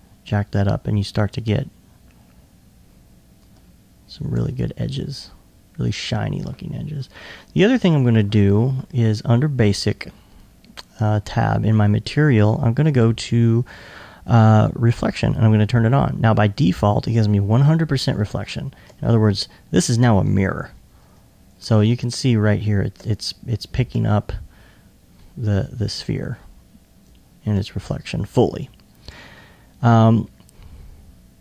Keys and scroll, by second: 6.8 super+r.